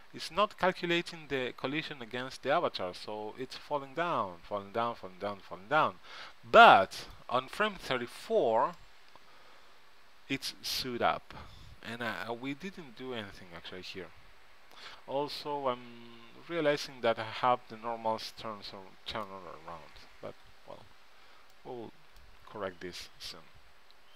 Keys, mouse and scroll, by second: 8.2 KP_Decimal, 21.7-23.2 right drag, 22.8 KP_Decimal, 23.7 KP_Decimal.